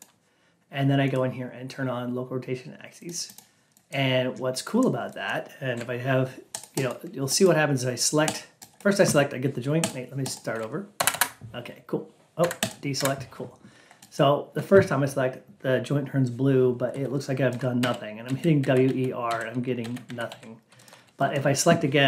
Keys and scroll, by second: 10.9 F8.